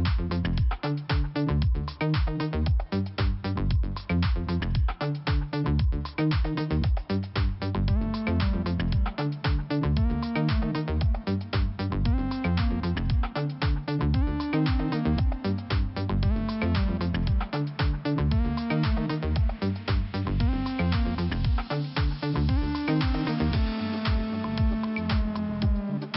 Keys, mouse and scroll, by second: 0.0 click, 3.5 click, 3.6 click, 4.1 scroll up 2, 5.4 click, 6.8-7.4 scroll down 1, 8.0 click, 9.4 click, 12.1 click, 13.5 scroll down 1, 14.6 click, 16.2-16.5 scroll up 2, 17.8 click, 17.8 click, 18.8 click, 21.6 click, 21.7 click, 22.0 click, 22.1 double click, 22.6 double click, 24.0 click, 25.4 click.